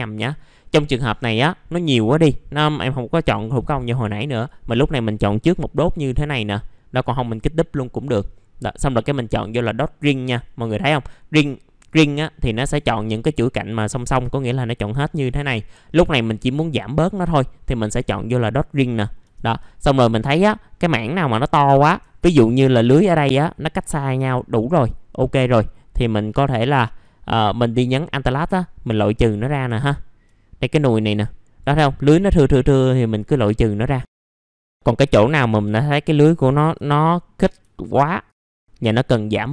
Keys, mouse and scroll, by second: 0.2-1.0 scroll up 1, 1.0 scroll up 1, 4.3 click, 8.3-11.8 scroll down 1, 11.8 click, 12.4-15.0 scroll down 1, 15.5-17.9 scroll up 1, 17.9 click, 18.7 middle click, 20.1-21.0 scroll up 1, 21.0-21.6 scroll down 1, 21.6-22.0 scroll up 1, 22.2 alt+click, 24.1 middle click, 24.8-25.1 scroll up 1, 25.1 middle click, 25.5-26.0 scroll up 1, 27.0-28.8 alt+drag, 29.1 middle click, 29.3-29.6 scroll down 1, 30.3-30.8 scroll down 1, 31.1 alt+click, 32.3 middle click, 32.4-32.8 scroll down 1, 32.8 middle click, 33.6 scroll up 1, 34.1 alt+click, 34.5 middle click, 34.5 scroll up 1, 34.9-36.7 alt+drag, 36.9 middle click, 38.3 alt+click, 39.1 middle click, 39.4-39.5 scroll down 1.